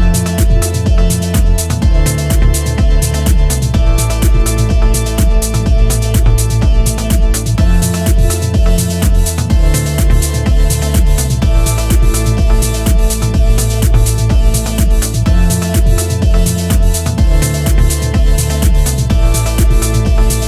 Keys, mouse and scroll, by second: 0.7 click, 1.4 scroll down 3, 1.6 middle click, 2.2 ctrl+z, 2.5 ctrl+z, 2.7 scroll up 4, 3.0 middle click, 3.9 ctrl+z, 5.8 click, 7.5 click, 8.8 click, 9.7 click, 10.3 click, 10.8 click, 12.0 click, 12.6 click, 13.8 click, 14.6 click, 15.2 click, 17.7 click, 18.3 click, 19.3 click, 20.4 scroll down 2.